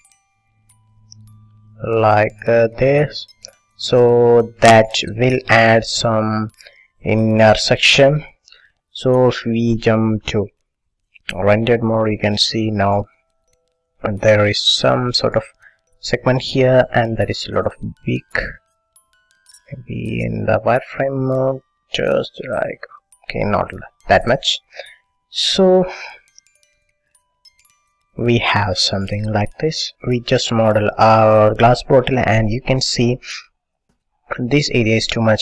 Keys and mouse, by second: 1.4-2.9 drag, 4.6-8.0 middle drag, 9.9-12.1 drag, 17.6-19.5 drag, 22.2-24.0 drag, 24.8-26.8 drag, 29.7 click, 30.3-32.2 middle drag, 32.5 middle click, 33.4 middle click.